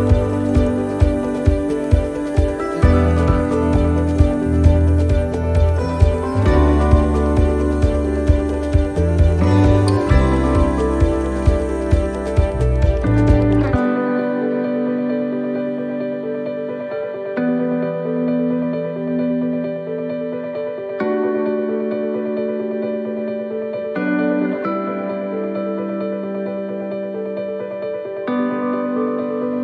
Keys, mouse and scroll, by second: 0.2 shift+middle click, 1.8 click, 10.0 middle click, 11.5 click, 13.1 middle click, 14.1 shift+middle click, 15.1 right click, 16.0 l, 17.1 click, 21.2 click, 21.2 right click, 22.4 l, 23.6 click, 28.3 right click.